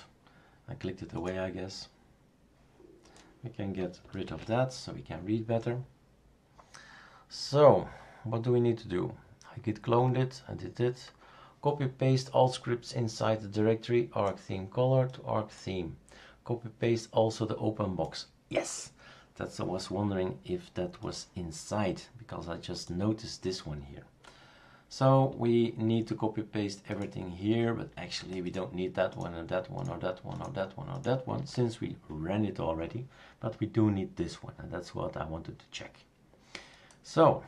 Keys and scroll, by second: 4.2 super+q.